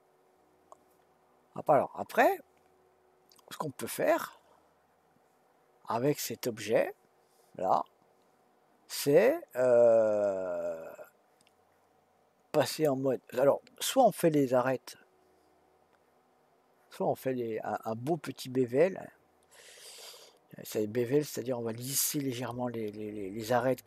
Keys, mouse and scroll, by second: 12.7-15.7 drag.